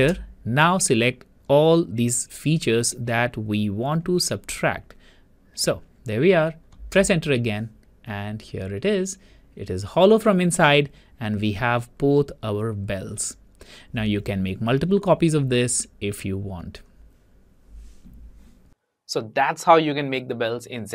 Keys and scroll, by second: 7.1 Return.